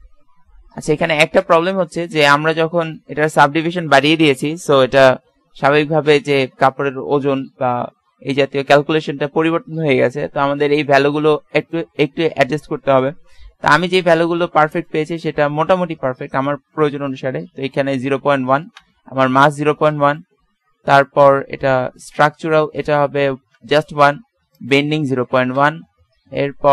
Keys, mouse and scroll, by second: 1.8 Escape, 11.6-16.5 drag, 20.0-21.9 drag, 22.8-26.5 drag.